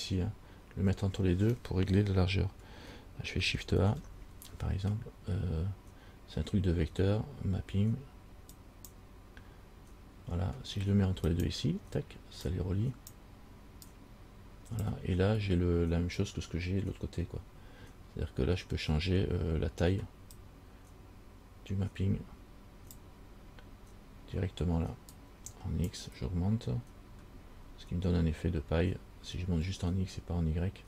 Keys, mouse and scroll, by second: 4.0 shift+a, 12.7 click, 14.1 click, 20.6 click, 25.4 click.